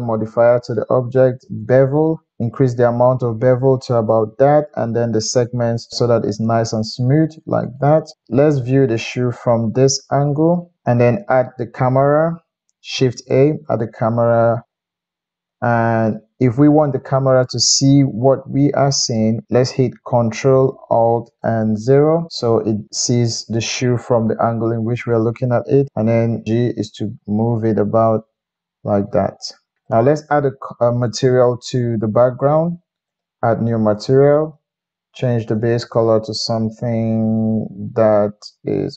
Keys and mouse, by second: 8.1-9.7 middle drag, 10.5-14.4 shift+middle drag, 13.2 shift+a, 19.4 ctrl+middle click, 19.6 middle click, 21.6 ctrl+alt+KP_0, 24.4-30.0 middle drag, 25.7 g, 29.8 g, 30.5 middle click, 31.5 click, 33.0-34.5 drag, 35.5-38.9 middle drag.